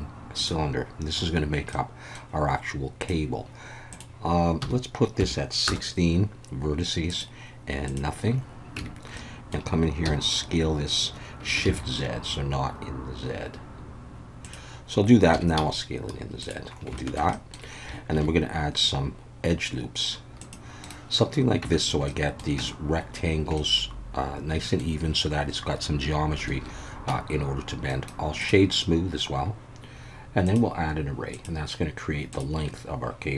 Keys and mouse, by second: 1.7 middle click, 3.0 click, 3.9-6.2 drag, 7.1-7.9 drag, 8.8 Tab, 9.2 middle click, 10.0 s, 11.7 shift+z, 14.4 click, 15.3 s, 15.6 z, 16.4 click, 17.1 shift+middle click, 17.4 middle click, 18.1 ctrl+r, 20.8 right click, 21.6 Tab, 22.1 middle click, 22.6 Tab, 23.6-24.8 middle drag, 26.6 alt+a, 27.1 Tab, 27.9 right click, 30.5 click, 31.4-32.4 drag.